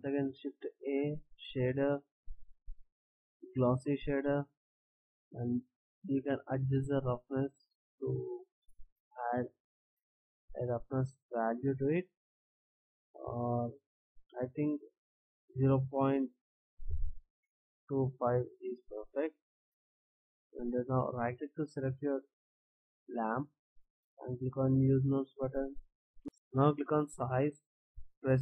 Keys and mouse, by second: 0.3 shift+a, 6.8 click, 16.4 BackSpace, 25.8 click, 26.2 ctrl+z, 26.9-28.4 drag.